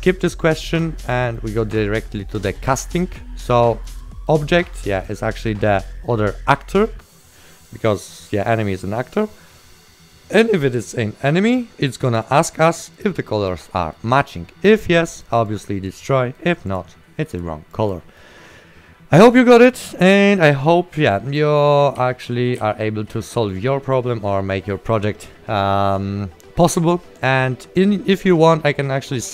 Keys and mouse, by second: 0.0 right click, 0.7 click, 0.9 right click, 1.7 right click, 4.0 right click, 5.2 click, 12.3 click, 13.8 right click, 15.6 click, 16.3 right click, 16.8 click, 17.9 right click, 19.4 click, 21.2 right click, 22.1 w, 22.4 a, 23.2 d.